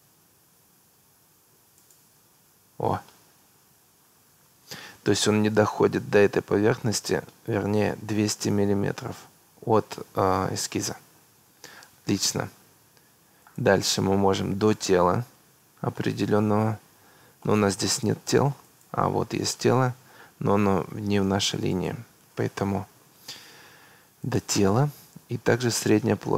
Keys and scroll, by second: 22.6 Delete.